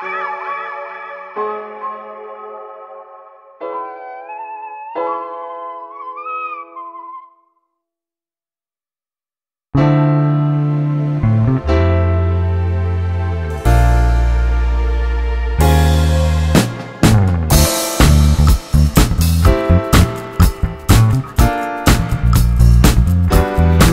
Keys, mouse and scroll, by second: 0.7 g, 2.5-4.2 drag, 4.2 g, 5.4-8.8 drag, 8.8 g, 9.9-12.9 drag, 12.9 scroll down 1, 13.3-15.5 middle drag, 15.5 click, 16.1 click, 16.4 scroll down 1, 16.8-19.4 middle drag, 19.4 KP_0, 20.0 scroll down 5, 21.7-22.9 middle drag, 22.9-23.5 scroll down 2.